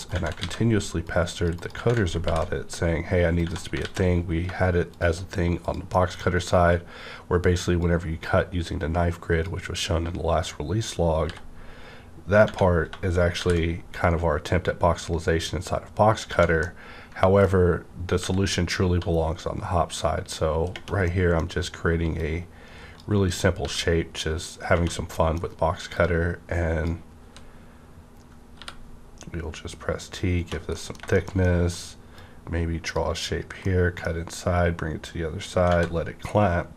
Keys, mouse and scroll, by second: 0.0 right click, 0.1 Tab, 0.4 ctrl+a, 1.0 click, 1.5 click, 1.7 Tab, 2.2 ctrl+b, 2.6 scroll up 1, 3.4 click, 3.8 alt+x, 4.9 shift+click, 5.6 shift+click, 6.1 middle click, 6.1 click, 6.2 scroll down 1, 7.8-11.9 drag, 11.2 b, 11.9 scroll up 1, 12.4 Tab, 12.4 ~, 13.4 shift+t, 16.3 Tab, 16.3 ~, 16.3 shift+t, 16.6-18.2 middle drag, 17.8-18.2 scroll up 1, 18.2 g, 20.7 g, 21.1 middle click, 21.5-22.1 scroll up 1, 22.1 click, 22.2-24.7 drag, 23.6 w, 25.1 middle click, 25.1 middle click, 25.9-28.6 drag, 27.2 w, 28.6 t, 30.3 space, 30.7 middle click, 31.1 shift+middle click, 31.4 shift+middle click, 32.1-35.7 drag, 33.6-36.7 middle drag, 35.7 Tab.